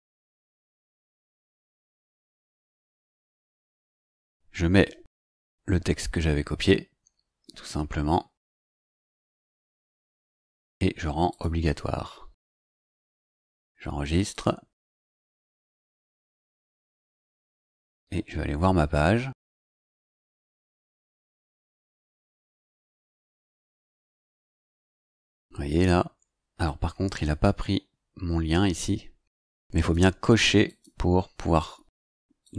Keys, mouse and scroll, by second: 2.1 click, 5.2 ctrl+v, 11.2 click, 14.3 click, 19.5 click, 20.6 click, 23.8-24.6 scroll down 3, 29.7 click, 30.6 click, 32.4 click.